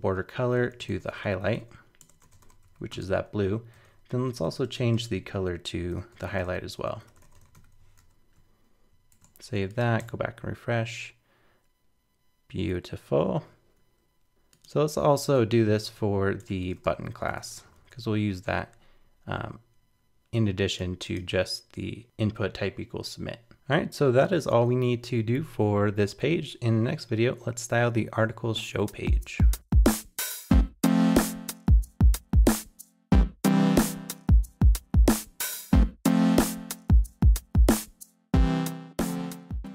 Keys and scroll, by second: 8.0 super+s, 9.1 super+Tab, 10.0 super+r, 14.3 super+Tab, 23.5 super+r.